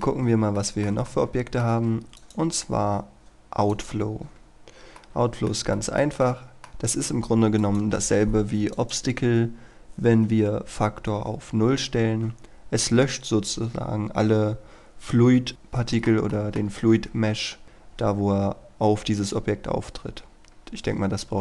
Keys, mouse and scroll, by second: 0.2 scroll up 1, 0.6 shift+middle click, 2.3 click, 4.6-5.0 scroll up 1, 5.0 middle click, 5.8 shift+middle click, 7.7-9.9 drag, 15.5 middle click, 16.3 shift+middle click, 20.3-21.4 scroll up 1.